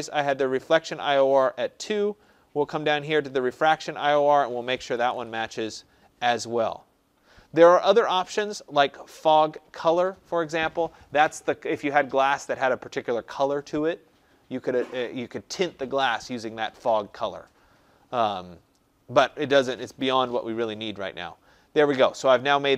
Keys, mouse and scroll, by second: 1.7 scroll, 1.8 middle click, 1.9 middle click, 4.2 click, 4.5-5.5 typing, 19.8 Tab.